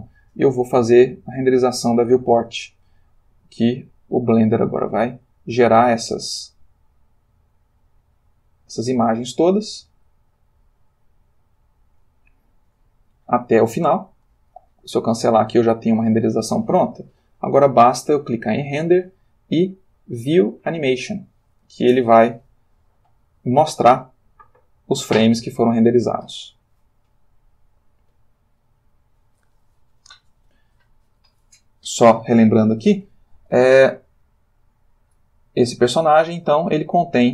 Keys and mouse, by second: 1.5 click, 3.7 click, 13.6 Escape, 15.1 click, 17.5 click, 20.7 click, 23.3-24.4 drag, 28.6 click, 35.3 click, 36.7-37.3 ctrl+middle drag.